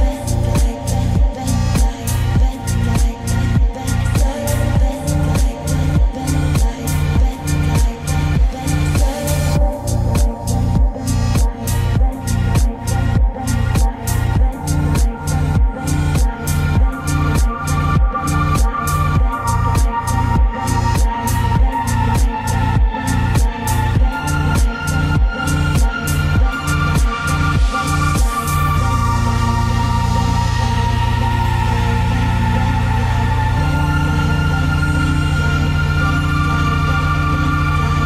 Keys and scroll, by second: 10.3 ctrl+space, 14.4 ctrl+;.